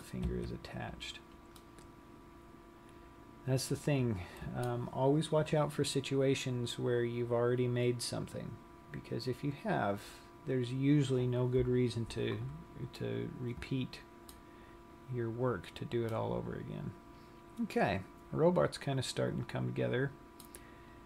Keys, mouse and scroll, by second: 0.7 Tab, 1.1 scroll down 1, 1.8 middle click, 13.2 middle click, 15.2-16.1 scroll down 1, 16.1 middle click.